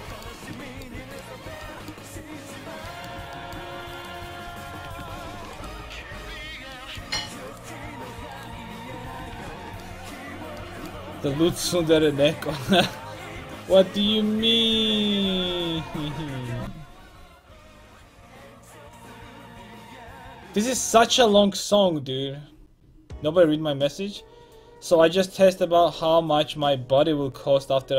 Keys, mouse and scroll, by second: 1.8-4.4 drag, 4.4 ctrl+x, 4.8 a, 5.2 ctrl+t, 5.3 a, 5.9 click, 6.3 middle click, 8.8 ctrl+x, 9.0 a, 9.3 ctrl+t, 9.5 a.